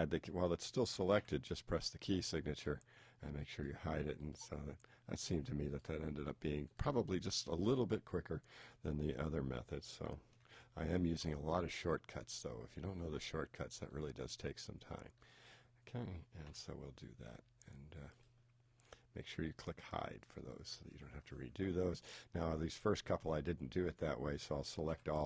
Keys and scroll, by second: 10.4 shift+t, 24.9 super+a.